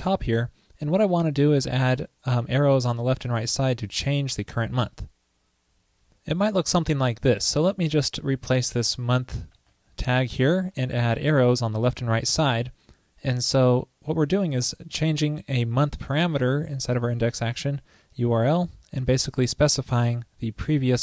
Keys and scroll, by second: 9.6 super+v.